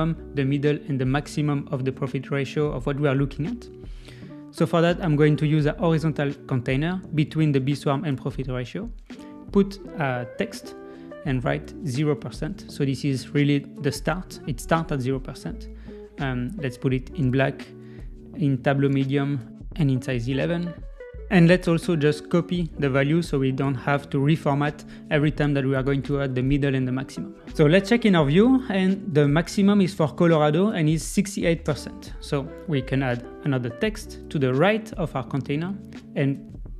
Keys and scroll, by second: 12.8 super+a, 22.2 super+a, 22.4 super+c, 27.7 Escape.